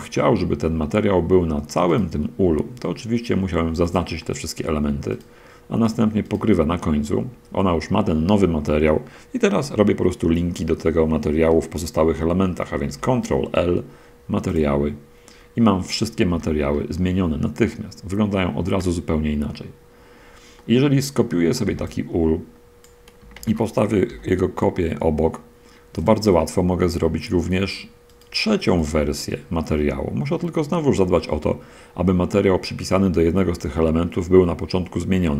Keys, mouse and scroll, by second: 0.4-1.7 middle drag, 2.2 right click, 3.5 shift+right click, 3.9 shift+right click, 4.6 shift+middle click, 6.6 shift+right click, 12.8 ctrl+l, 14.6 click, 16.6 a, 17.0-18.9 middle drag, 19.8-20.2 scroll down 2, 20.8-21.4 middle drag, 21.4 scroll down 2, 21.8-23.3 drag, 21.8 b, 23.3 shift+d, 24.4 y, 26.3-27.4 shift+middle drag, 28.3-28.7 right drag, 29.1 right drag, 30.8 middle click.